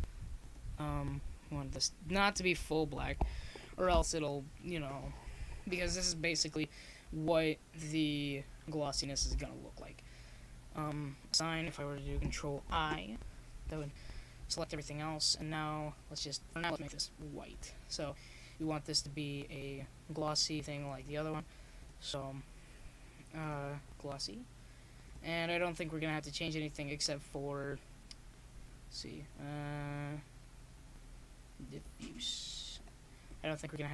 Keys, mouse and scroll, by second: 0.6-2.4 drag, 2.4 middle click, 22.8-24.7 drag, 25.9-27.2 drag, 27.2 middle click, 28.6 middle click, 29.4-30.5 drag.